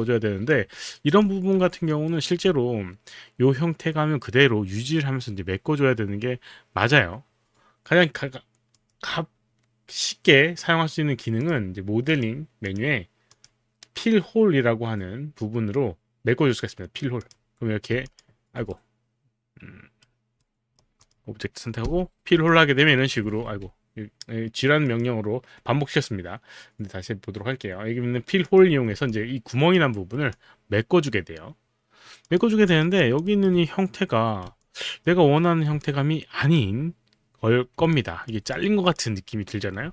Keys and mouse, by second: 0.7 alt+middle click, 1.2 alt+click, 1.2 alt+middle click, 1.8 alt+middle click, 2.1 alt+right click, 8.8 click, 11.4 click, 12.1 click, 12.6 click, 13.3 click, 17.2 click, 18.7 right click, 20.4 right click, 21.0 click, 21.9 click, 21.9 g, 22.4 alt+click, 22.9 alt+right click, 24.9 click, 28.5 click, 29.1 alt+click, 29.9 alt+right click, 30.3 alt+click, 32.2 alt+click, 32.6 alt+right click, 32.9 alt+click, 32.9 alt+middle click, 34.6 alt+click, 35.8 alt+click, 37.9 alt+click, 38.5 click.